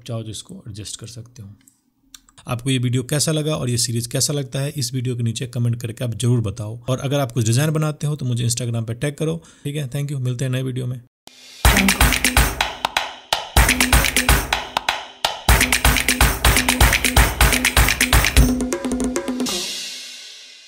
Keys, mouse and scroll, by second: 1.1 Return.